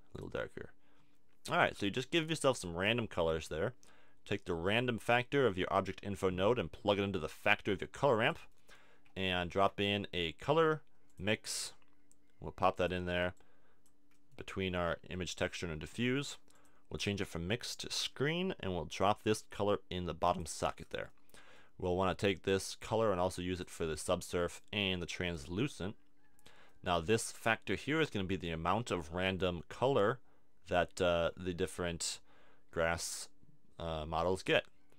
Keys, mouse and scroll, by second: 1.7-4.5 middle drag, 4.5-6.4 drag, 7.8 click, 8.5 middle click, 9.5 shift+a, 14.2-17.9 drag, 20.8 click, 22.6 click, 24.0 click, 25.3-26.4 drag, 26.7 click, 26.9-30.1 middle drag, 30.1 click, 30.8 middle click, 32.9 click.